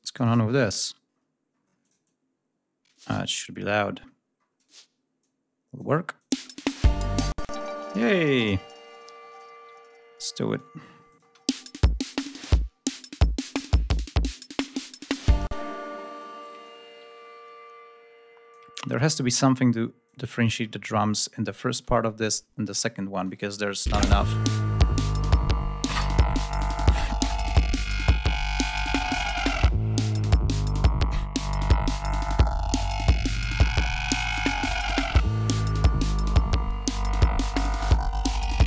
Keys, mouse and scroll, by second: 0.3-1.5 scroll up 2, 1.5 click, 3.7-4.2 scroll up 2, 4.2 click, 4.8 click, 5.8 click, 6.0 space, 6.9 space, 7.0 ctrl+click, 7.3-7.6 ctrl+scroll down 1, 8.0 ctrl+g, 8.6 ctrl+click, 9.0-10.4 ctrl+drag, 10.7 click, 10.9 space, 11.4 ctrl+scroll down 1, 13.2 ctrl+scroll down 1, 15.1 space, 15.3-16.0 ctrl+drag, 16.3-18.3 ctrl+drag, 18.4 ctrl+scroll up 2, 18.7 ctrl+scroll down 2, 19.7 click, 20.4-20.7 ctrl+scroll down 2, 21.0 ctrl+scroll up 2, 22.8 click, 23.5 space, 24.5 ctrl+scroll up 1, 24.9-27.7 ctrl+scroll down 11, 28.4 ctrl+scroll up 2, 29.0-30.2 ctrl+scroll up 5, 30.5 scroll down 2, 31.6 ctrl+scroll up 2, 36.0 ctrl+scroll down 2, 36.7 ctrl+scroll up 1, 36.9 ctrl+scroll down 1, 37.2-37.9 ctrl+scroll up 2, 38.5 ctrl+scroll down 2.